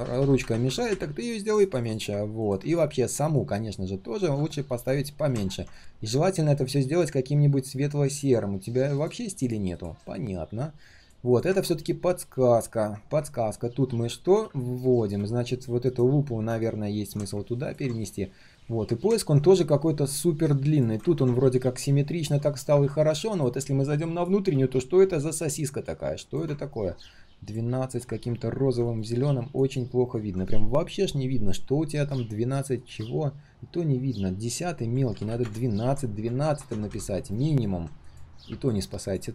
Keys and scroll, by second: 18.5 ctrl+z, 33.5 ctrl+z.